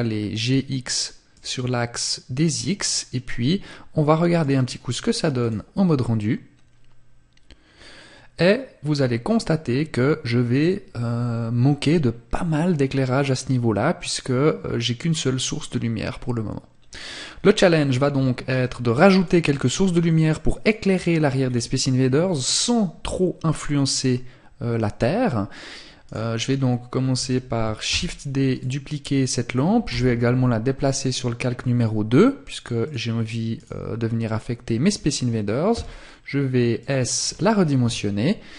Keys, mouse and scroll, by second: 0.6 click, 1.7 scroll up 1, 3.6 click, 18.3 click, 19.9 click, 20.6 scroll down 1, 24.1 middle click, 25.2 right click, 27.3 shift+d, 27.7 click, 29.1 m, 32.0 click, 32.7 right click, 36.1 click, 37.0 KP_7, 38.3 g.